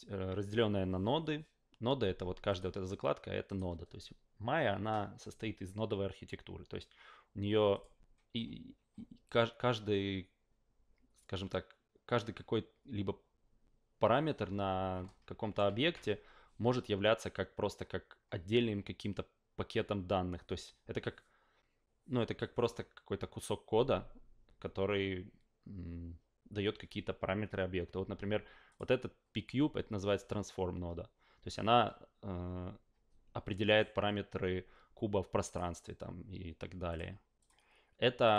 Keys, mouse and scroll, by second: 2.5 click, 3.4 click, 7.7 click, 15.0-15.5 alt+middle drag, 28.7 click, 35.4 click, 36.9 click, 37.4 click, 38.2 click.